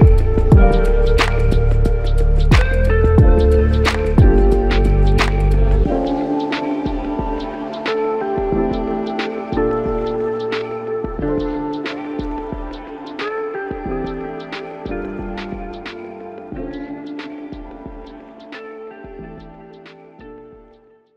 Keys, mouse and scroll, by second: 0.1 alt+shift+click, 9.9 f, 10.9 shift+click, 12.0 alt+click, 12.5 alt+shift+click, 12.8 shift+double click, 13.7 alt+shift+click, 14.2 alt+shift+click, 15.4 alt+click, 16.3 shift+click, 18.1 shift+click, 19.4 alt+shift+click.